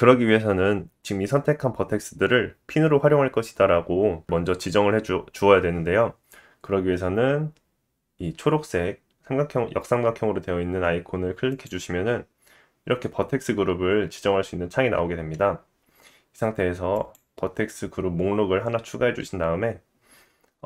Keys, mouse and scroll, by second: 11.6-16.9 drag, 17.6-20.0 scroll down 1.